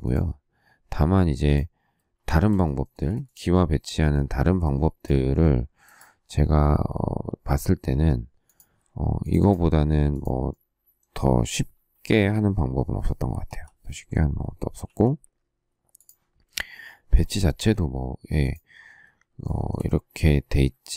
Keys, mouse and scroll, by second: 2.1 shift+scroll, 2.3 shift+middle click, 2.8 space, 2.9 Escape, 12.0 k, 14.0 k, 14.8 q, 19.3 shift+scroll, 19.4 shift+middle click.